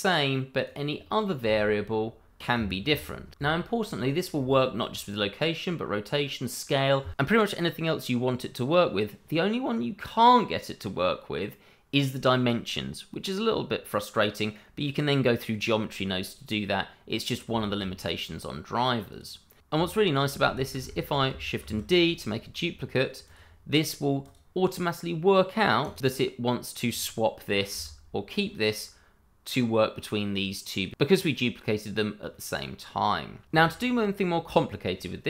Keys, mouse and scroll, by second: 0.3 click, 0.5 middle click, 0.8 g, 2.8 Escape, 3.3 middle click, 4.1 shift+middle click, 4.7 shift+middle click, 17.3 scroll down 1, 17.6 shift+middle click, 17.9 middle click, 18.9 click, 19.2 scroll down 1, 19.6 shift+middle click, 20.7 shift+middle click, 21.2 shift+click, 21.5 shift+middle click, 22.0 shift+d, 23.2 click, 27.7 g, 33.6 scroll down 1.